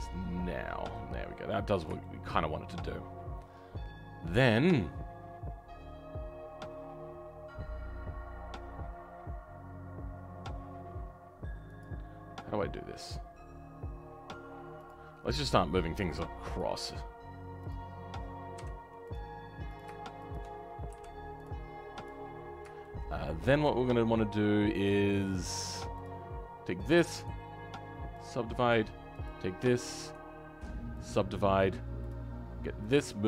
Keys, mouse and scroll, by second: 2.0-11.7 shift+middle drag, 11.7-16.5 drag, 21.4 m, 22.8 shift+middle click, 23.5-26.0 scroll up 1, 26.0 click, 28.2 right click, 31.0 right click, 32.1 click.